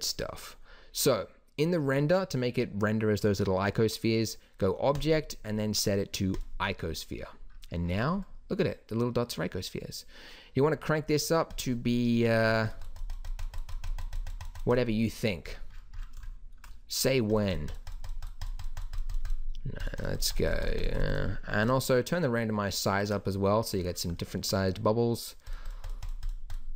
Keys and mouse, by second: 5.0-6.8 drag, 6.9-7.3 middle drag, 7.8-8.2 middle drag, 11.5-15.3 drag, 15.3 middle click, 15.5 click, 16.5 click, 17.3 click, 18.6-20.5 drag, 23.5 middle click, 23.8 middle click, 25.5-26.7 drag.